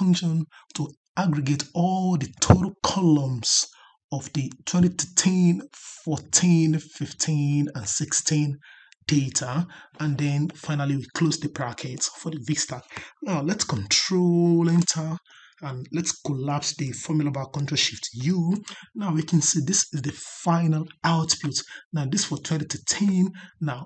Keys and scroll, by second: 14.5 ctrl+Return, 18.0 ctrl+shift+u.